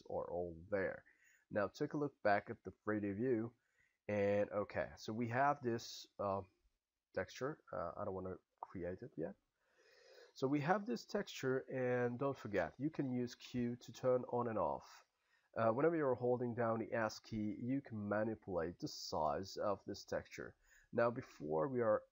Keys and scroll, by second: 13.4 q, 16.0 s, 16.5 s, 20.6 s, 21.3 q.